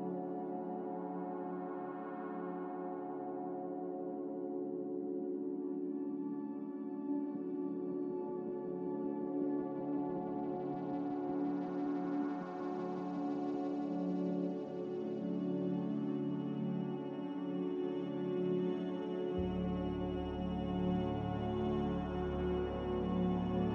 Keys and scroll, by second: 3.8 Delete, 20.8-23.7 typing.